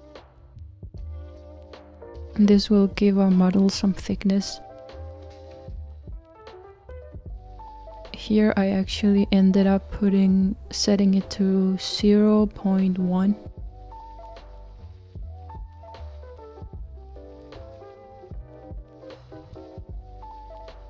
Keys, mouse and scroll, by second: 0.0 click, 2.0-3.7 middle drag, 3.7-4.9 scroll up 2, 4.9-8.0 scroll up 1, 8.7-14.8 drag.